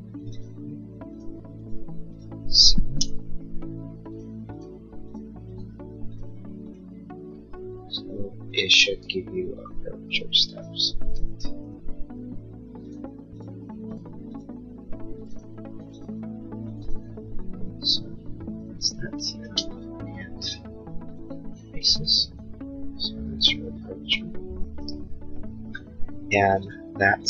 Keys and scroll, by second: 2.8 7, 3.0 Return, 11.7 Return, 19.5 space.